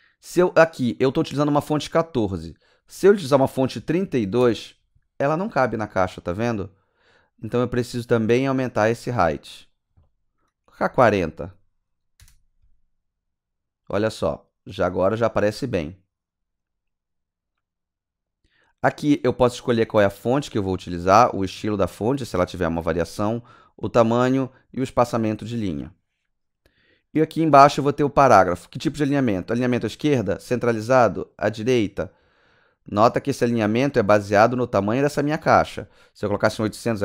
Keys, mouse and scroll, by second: 2.3 KP_Enter, 3.8 KP_3, 4.0 KP_2, 4.4 Return, 9.4 Return, 12.2 KP_Enter, 17.5 KP_Enter, 21.1 click, 22.0 click, 30.0 click, 31.2 click, 32.9 click, 33.2 click, 33.6 click, 34.1-34.8 scroll up 5, 35.5 click, 36.2 KP_8, 36.5 KP_0.